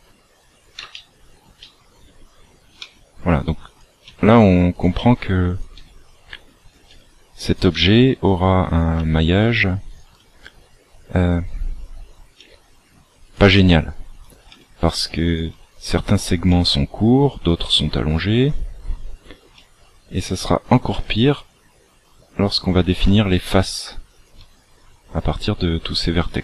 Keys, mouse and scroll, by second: 0.9 shift+middle click, 2.8 e, 4.0 e, 5.8 e, 6.9 e, 9.0 e, 10.1 e, 12.3 e, 13.5 e, 14.4 e, 15.5 e, 17.6 e, 19.6 e, 23.0 e, 24.3 e.